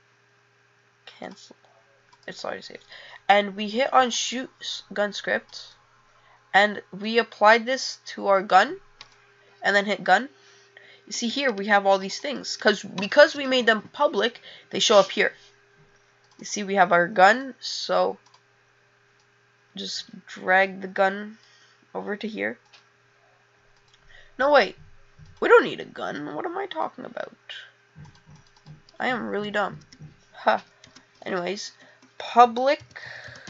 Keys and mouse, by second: 4.2 click, 7.2 click.